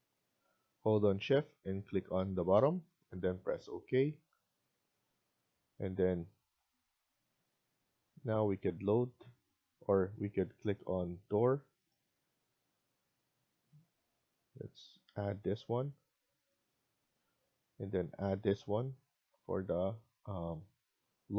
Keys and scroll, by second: 19.1 Escape, 19.4 Escape.